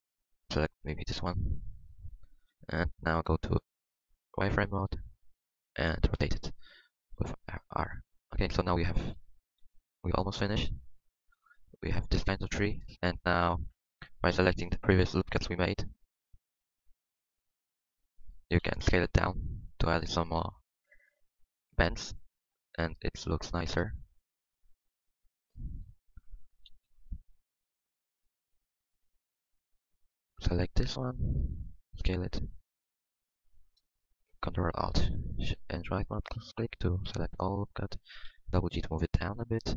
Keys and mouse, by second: 0.4 Tab, 1.5 a, 1.5 l, 2.6 KP_7, 3.2 z, 4.6 r, 5.6 r, 6.4 Tab, 7.0 Tab, 8.1 z, 8.7 z, 9.1 z, 9.6 KP_1, 9.9 Tab, 12.4 Tab, 18.6 KP_1, 19.2 s, 20.9 s, 26.6 KP_3, 26.8 KP_1, 27.5 s, 31.5 s, 32.7 click, 36.2 click, 36.2 s, 38.2 g.